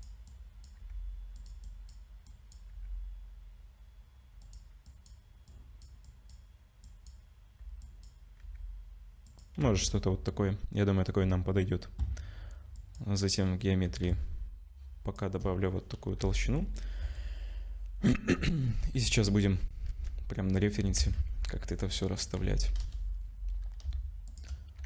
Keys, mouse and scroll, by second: 0.3 click, 0.8 g, 1.6 click, 2.3 click, 2.7 g, 4.9 click, 5.5 click, 6.8 click, 7.8 click, 8.4 g, 9.6 Tab, 12.8 click, 14.1 shift+click, 16.2 /, 17.0 KP_0, 18.4 z, 19.1 scroll up 2, 19.9 z, 20.8 r, 24.3 shift+click.